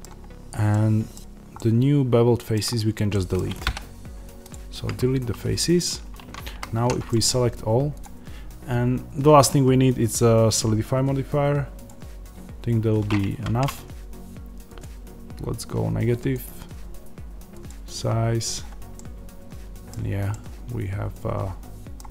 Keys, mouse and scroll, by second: 1.1-1.5 scroll down 2, 2.6-3.0 scroll up 2, 4.4 x, 5.5 Tab, 6.4 a, 11.8-18.9 drag, 13.1 Tab, 18.9-22.1 middle drag, 19.8-20.2 scroll down 2, 21.9 scroll down 2.